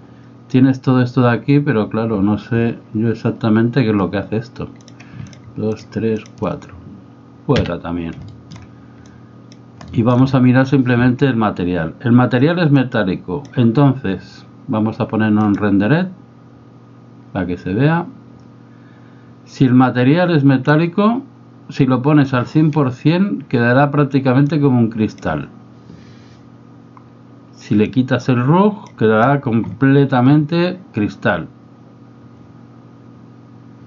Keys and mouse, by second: 6.2 shift+click, 7.6 x, 8.3 shift+middle click, 9.1 click, 9.9 shift+middle click, 12.9 click, 20.7-22.4 drag, 24.5 click, 27.9-28.9 drag.